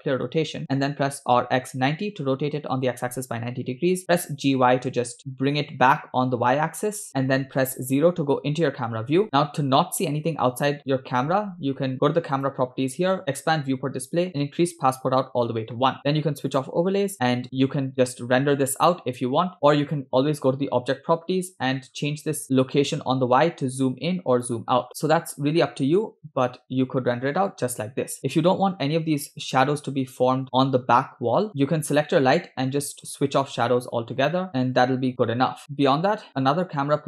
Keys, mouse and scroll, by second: 0.8 r, 3.7 r, 5.2 g, 7.8 KP_0, 9.3-9.6 scroll down 2, 12.4 click, 12.8-13.2 scroll down 2, 13.2 click, 13.8-14.4 scroll down 3, 14.6 click, 16.8 click, 17.1 space, 19.5 space, 19.8 click, 21.9-22.4 scroll up 2, 22.4-24.6 shift+drag, 24.9 space, 25.1-25.5 scroll up 2, 25.9-26.3 scroll down 2, 27.3 space, 27.9 space, 28.4 space, 28.7 space, 29.8 space, 30.1 space, 30.5 space, 31.5 scroll down 1, 31.9 click, 33.2 click, 34.5 scroll up 1, 34.5 space, 35.1 space, 35.5 space, 35.8 space, 36.3 click.